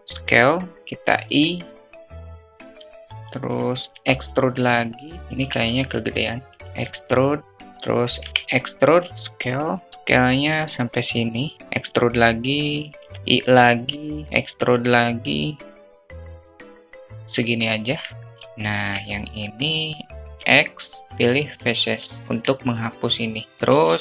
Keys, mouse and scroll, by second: 0.8 i, 2.4 alt+click, 3.2 alt+z, 3.4 e, 5.1 ctrl+z, 5.1 s, 6.4 e, 7.7 e, 11.5 e, 14.3 e, 17.2 alt+click, 18.2 shift+click, 18.2 shift+a, 20.1 x, 21.7 alt+click.